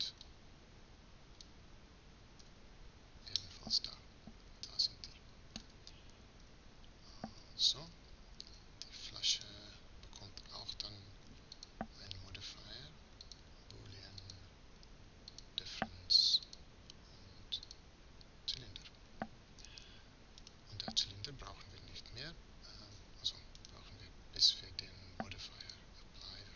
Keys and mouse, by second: 2.4 f, 3.6-4.8 middle drag, 6.5 Tab, 7.5 z, 9.4-11.0 right drag, 14.3-19.4 right drag, 21.2 right click, 23.6-26.5 right drag.